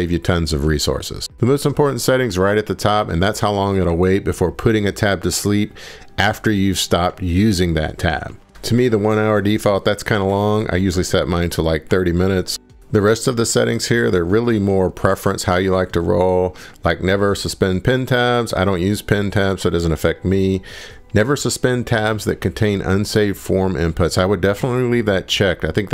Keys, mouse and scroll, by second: 1.5 scroll, 3.4 click, 6.0 click, 7.8 click, 12.8-19.4 drag.